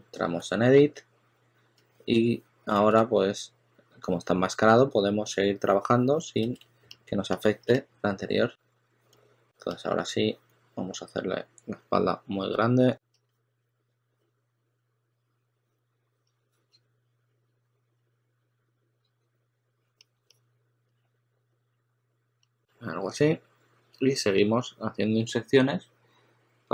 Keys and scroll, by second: 0.0-0.3 typing, 2.7 super+z, 4.6 s, 6.3 super+z, 7.6 s, 15.4-17.2 typing, 22.3 s.